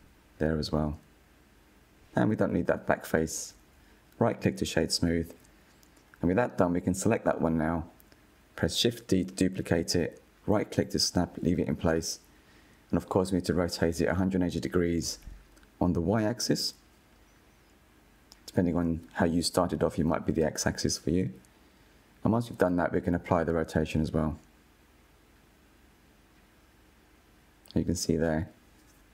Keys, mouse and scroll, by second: 0.5 click, 0.9 Tab, 1.0 /, 1.2 Tab, 1.3 middle click, 1.6 click, 1.8 i, 2.3 click, 2.7 Delete, 3.1 Tab, 3.6 click, 4.2-4.6 right drag, 4.7-5.3 middle drag, 5.3-5.8 scroll down 7, 5.5 /, 5.8-6.4 middle drag, 6.4 KP_1, 6.5-6.8 scroll down 3, 6.9 shift+middle click, 7.9 click, 9.6 shift+d, 10.7 click, 11.6 click, 13.2-14.0 shift+middle drag, 14.0-14.8 scroll up 3, 14.8-17.7 shift+middle drag, 17.7-19.2 drag, 24.3-24.8 drag, 24.8-27.4 middle drag, 27.4-29.1 drag.